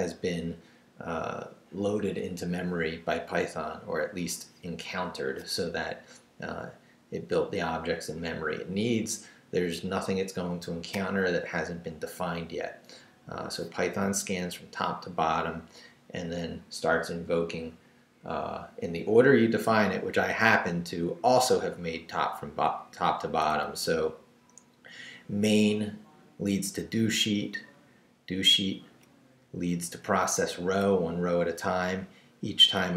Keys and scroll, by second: 20.1 Up, 21.9 Down, 23.5 Down, 24.9 Down, 29.3 Down, 31.4 Down.